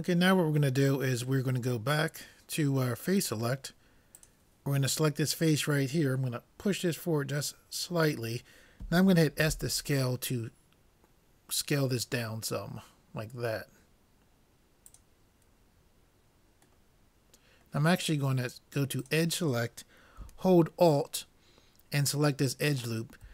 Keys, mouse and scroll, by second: 3.3-5.9 drag, 6.8-8.5 drag, 9.5 s, 16.9-18.1 middle drag, 19.1-20.7 drag, 22.2-23.3 drag.